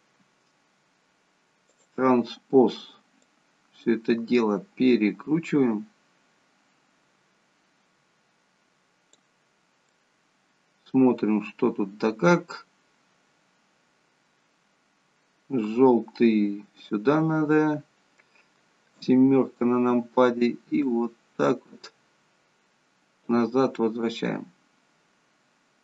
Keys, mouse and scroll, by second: 1.7 click, 10.0 middle click, 19.0 KP_7, 20.8 click, 23.7 middle click.